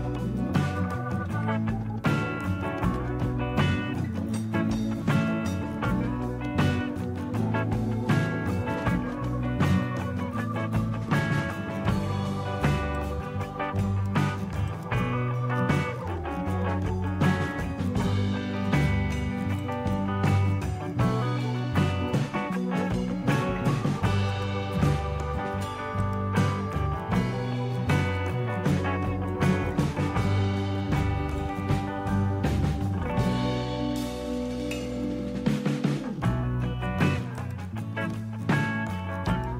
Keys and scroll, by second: 0.9 typing, 2.7-3.4 typing, 7.7-9.4 typing.